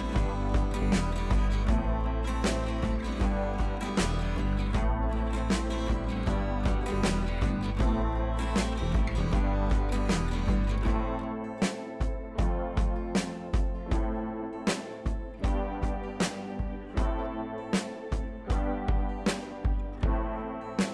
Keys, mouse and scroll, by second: 0.5 ctrl+[, 6.4 click, 8.7 click, 10.5-13.0 drag, 14.6-15.8 drag, 18.0-18.8 scroll down 1, 18.8 click, 18.9 scroll down 1, 19.6 click, 19.7-20.2 scroll down 1.